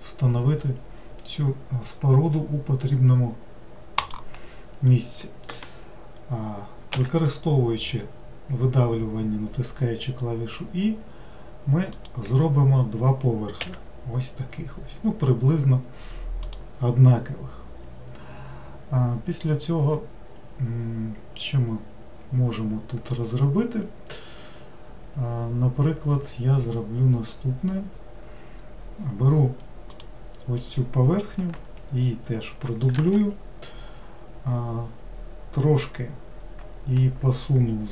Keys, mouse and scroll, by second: 6.9 e, 13.6 e, 29.9 click, 33.0 shift+d.